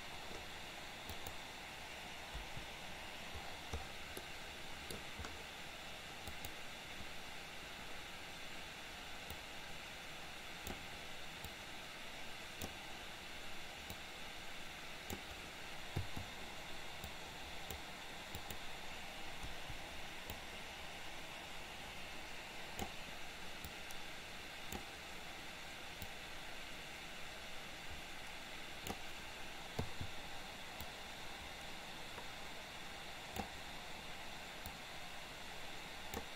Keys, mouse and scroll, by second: 1.1 click, 2.4 Delete, 4.3 middle click, 6.3 click, 9.3 click, 9.7-10.8 drag, 11.6-12.9 drag, 13.9-15.4 drag, 16.1 i, 17.2 click, 18.4 click, 19.6 Delete, 20.6-22.9 drag, 23.8-24.9 drag, 26.2 click, 26.9-29.2 drag, 29.9 i, 30.9-33.7 drag, 34.7-36.3 drag.